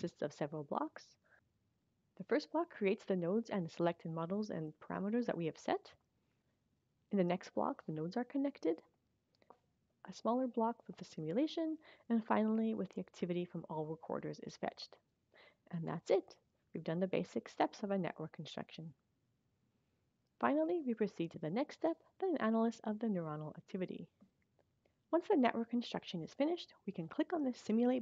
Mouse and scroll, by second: 4.0-5.3 drag, 6.3 click, 8.9 click, 9.8 click, 10.2 click, 11.3 click, 12.1 click, 13.3 click.